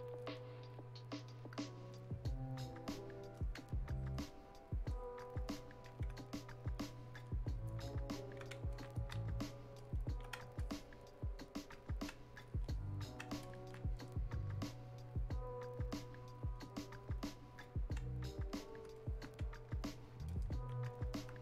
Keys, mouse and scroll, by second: 3.9-6.8 alt+drag, 6.8-8.7 ctrl+drag, 9.8 click, 10.6-13.4 alt+drag, 16.6-20.3 drag.